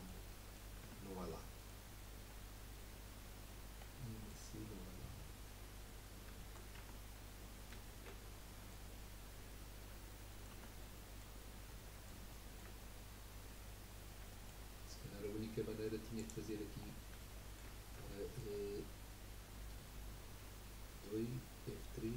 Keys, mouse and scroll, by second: 0.8 Tab, 1.2 middle click, 1.8-2.5 scroll up 5, 3.8-5.7 middle drag, 5.7-6.4 scroll down 3, 6.4 shift+middle click, 6.7 Tab, 7.2-7.5 scroll down 2, 7.5-10.5 middle drag, 10.5 Tab, 10.9 middle click, 11.3-11.7 scroll up 2, 11.7-12.8 middle drag, 12.8 scroll up 2, 13.7-14.3 scroll up 1, 14.3 shift+middle click, 14.8 scroll up 1, 16.1 click, 16.8-17.2 scroll down 4, 17.2-21.2 shift+middle drag.